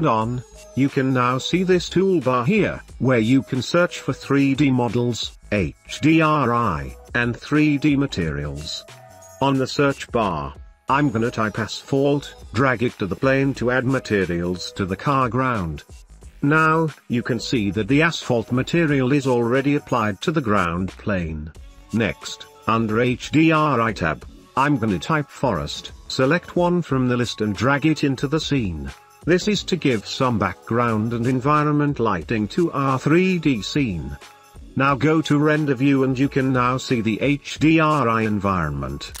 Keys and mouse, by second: 0.1 ctrl+s, 1.2-5.2 drag, 5.8 click, 9.9-11.8 drag, 14.7 click, 18.1 click, 19.7 ctrl+s, 20.2 shift+middle drag, 21.8 click, 22.6-24.5 drag, 30.2 click, 34.8 ctrl+s, 36.5 shift+middle click, 37.7 ctrl+s.